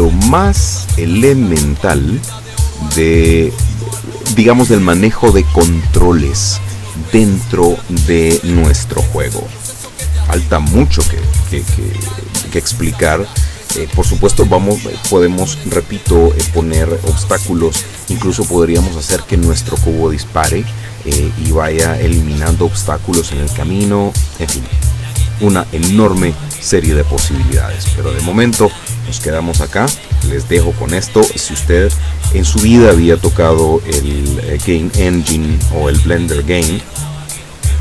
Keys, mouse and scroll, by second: 0.6 click, 2.7 click, 3.9 click.